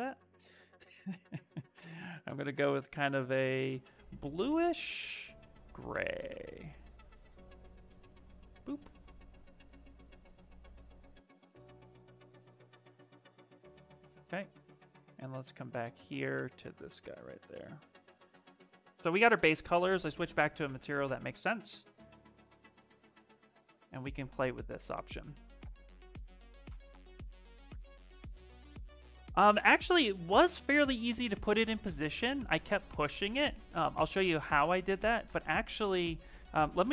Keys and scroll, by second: 36.5-36.9 typing.